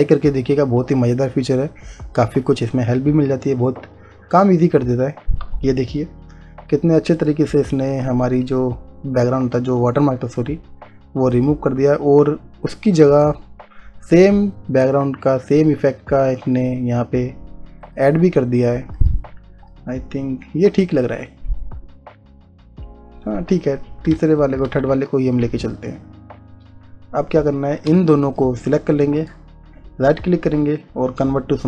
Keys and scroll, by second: 24.3 space.